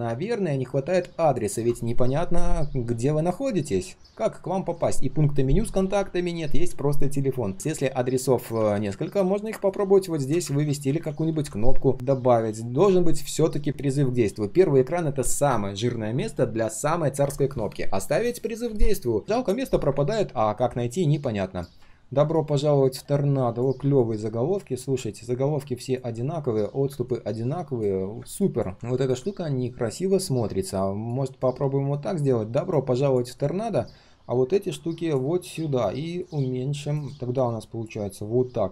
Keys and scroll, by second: 10.4 ctrl+d, 10.8 ctrl+z, 11.0 ctrl+z, 11.2 ctrl+z.